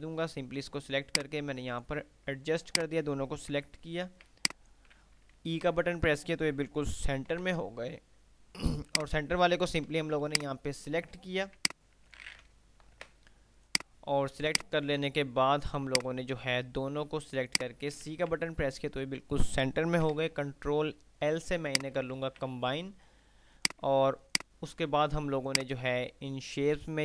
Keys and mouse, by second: 4.5-5.0 alt+click, 5.7 e, 7.5 ctrl+l, 9.0 click, 10.5-11.0 drag, 11.8-12.3 alt+drag, 12.8 shift+Page_Up, 13.8 click, 17.7 shift+click, 18.2 c, 20.3 ctrl+l, 21.8 shift+click, 22.3 c, 23.7 click.